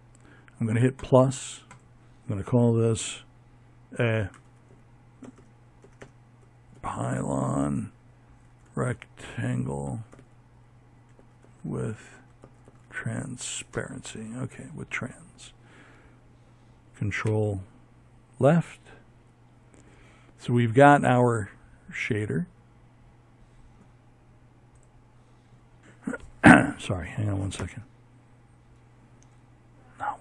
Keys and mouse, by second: 3.3 BackSpace, 4.0 BackSpace, 15.3 ctrl+Left, 28.9 ctrl+Left.